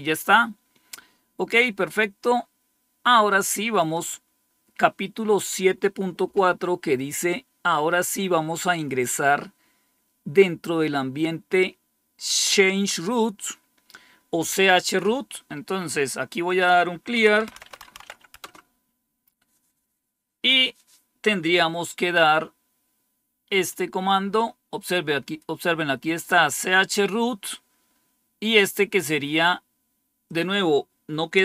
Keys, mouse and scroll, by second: 3.6 click, 16.3 click, 17.2-18.4 typing, 30.1-31.3 drag, 31.0-31.4 typing.